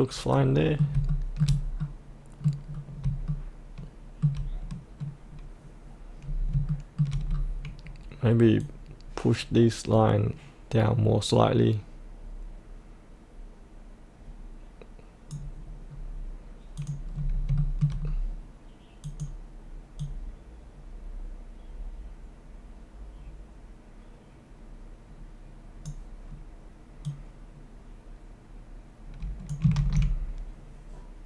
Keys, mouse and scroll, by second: 1.0 shift+middle click, 1.7 middle click, 2.7-3.0 scroll down 1, 3.2 shift+middle click, 6.2-6.5 scroll up 1, 6.7 shift+middle click, 7.3-8.6 scroll down 1, 8.6-15.9 drag, 15.9-16.8 scroll down 1, 16.8 click, 17.1-17.5 scroll up 1, 17.5 shift+middle click, 18.0-19.0 scroll down 1, 19.0-29.6 drag.